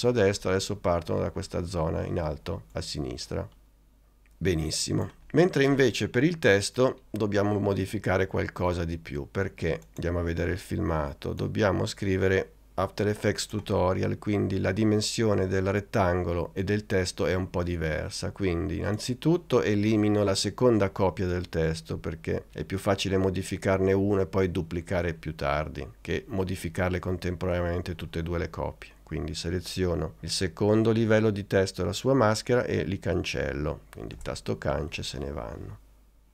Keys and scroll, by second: 34.2 BackSpace.